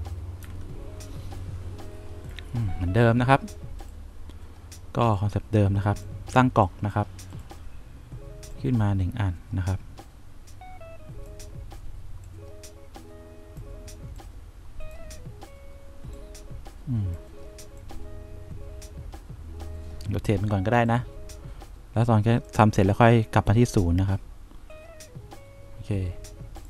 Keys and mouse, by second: 0.8 F4, 9.9-11.6 drag, 12.5-13.9 drag, 14.5 click, 16.4-17.4 drag, 18.1-19.9 drag, 22.9 click.